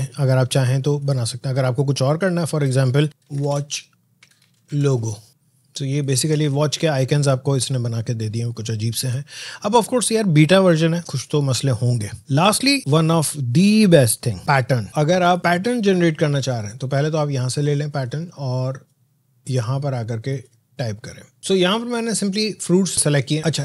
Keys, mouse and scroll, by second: 10.2 scroll down 1, 12.8 click, 14.9 click, 17.3-21.4 drag.